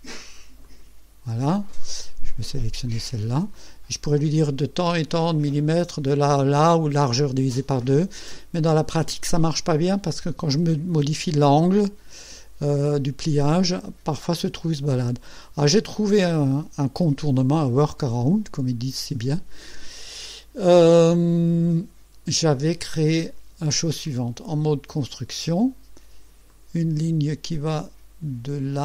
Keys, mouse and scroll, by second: 0.6 click, 2.9 click, 3.5 right click, 24.9 click, 26.5 click.